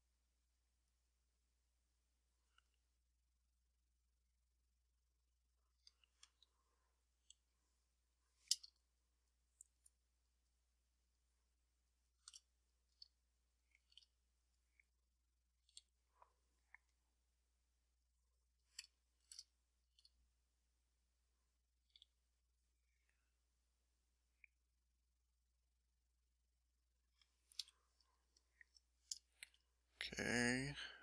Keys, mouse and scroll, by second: 2.2 click, 3.1 click, 3.4 click, 3.9 click, 4.3 click, 5.5 click, 7.1 a, 8.7 shift+click, 9.6 shift+click, 10.8 shift+click, 11.8 shift+click, 12.4 shift+click, 13.5 shift+click, 14.0 shift+click, 15.7 s, 16.0 click, 17.1-18.2 drag, 18.5 middle click, 18.9 ctrl+scroll up 1, 18.9 ctrl+middle click, 19.4 ctrl+shift+scroll up 1, 19.7-20.7 ctrl+shift+middle drag, 20.8 middle click, 21.9 f, 22.4 scroll up 1, 23.2 ctrl+shift+click, 24.1 click, 24.8 click, 25.4 click, 26.0 click, 26.6 click, 27.6 m, 27.8 ctrl+click, 28.8 ctrl+click.